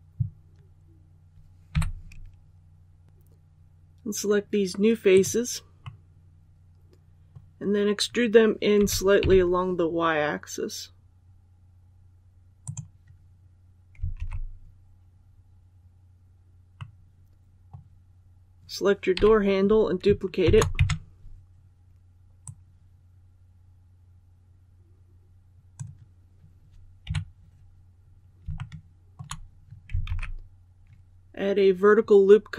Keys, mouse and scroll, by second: 1.7 3, 5.0 right click, 5.8-8.2 middle drag, 8.7-9.1 typing, 12.6 click, 14.1 alt+a, 16.7-18.2 middle drag, 20.3 shift+d, 22.3-26.1 drag, 27.0 KP_3, 27.9 scroll up 1, 28.5 shift+middle click, 30.0 alt+a.